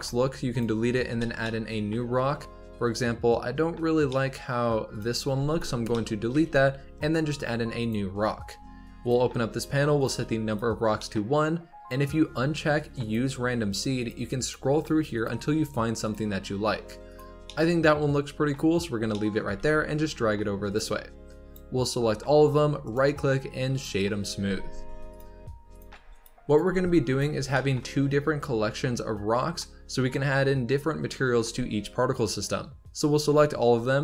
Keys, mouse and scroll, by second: 0.0 g, 0.7 z, 1.1-3.5 shift+middle drag, 3.5-4.0 scroll up 2, 4.0-4.8 middle drag, 4.8 click, 5.3 x, 5.8-6.2 middle drag, 6.2 shift+a, 9.0-10.5 drag, 10.9-13.0 shift+middle drag, 13.0 click, 13.9-17.4 drag, 17.4-19.4 middle drag, 19.4 g, 20.9 scroll down 4, 21.2 drag, 22.8-24.4 right drag, 24.4 g, 25.6 click, 25.8 g, 26.4 click, 26.6 g, 27.5-30.6 shift+middle drag, 32.1 click.